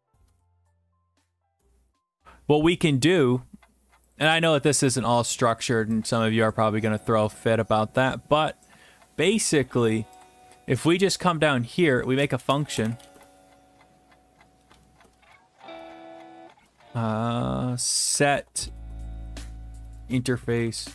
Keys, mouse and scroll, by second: 0.0-1.4 typing, 4.2 click, 5.6 click, 6.5 click, 7.1 click, 8.6 click, 10.2 click, 11.1 scroll, 12.2 click, 12.4 Return, 12.8 typing, 14.7-16.6 typing, 17.6-20.9 typing.